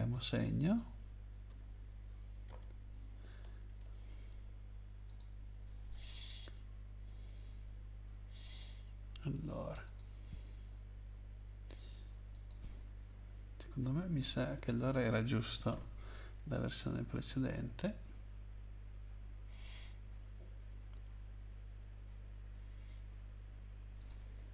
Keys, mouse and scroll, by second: 0.5 click, 1.5 BackSpace, 2.4 -, 3.7 ctrl+s, 5.1 click, 9.8 click, 12.3 click, 13.8 Left, 14.2 typing, 15.4-16.2 typing, 16.8 ctrl+s, 19.5 click, 24.0 click.